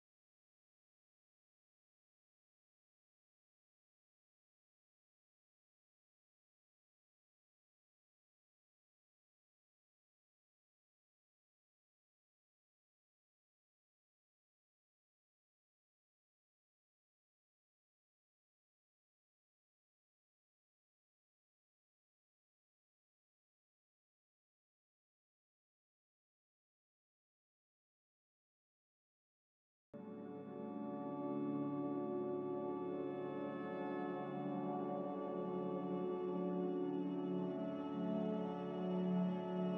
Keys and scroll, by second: 0.9 ctrl+c, 1.1 ctrl+v, 1.5-2.4 typing, 15.0 Delete, 17.6 Delete, 18.2 Delete, 20.0 ctrl+c, 20.1 ctrl+v, 21.5-22.4 typing, 26.4 m, 33.2 z, 37.2 a.